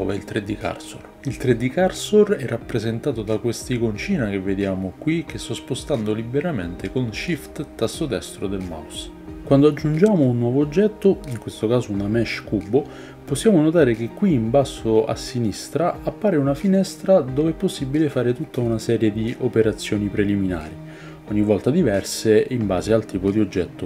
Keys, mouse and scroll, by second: 2.6 shift+click, 2.7-4.0 shift+middle drag, 4.0-4.3 shift+right drag, 4.3-5.3 shift+middle drag, 5.3 shift+right click, 5.7-6.7 shift+middle drag, 6.7 shift+right click, 6.9-7.6 shift+middle drag, 7.6 shift+right click, 7.8-23.8 shift+middle drag, 10.6 shift+c, 11.8 shift+a.